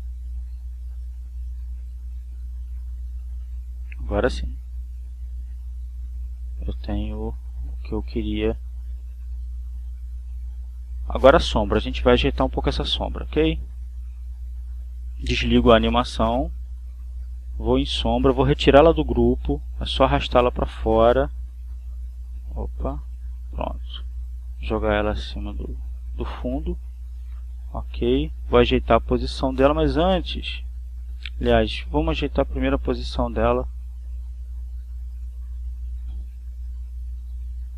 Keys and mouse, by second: 0.9 click, 2.7 click, 4.1 click, 6.9 click, 7.6 click, 8.6 click, 11.1 click, 11.9 click, 14.9 click, 16.6-17.6 drag, 17.8 click, 21.3-22.7 drag, 23.0-24.3 drag, 25.4-26.8 drag, 26.9 click, 31.5 click, 32.8 Left, 34.9 click, 35.8 click, 37.5 click.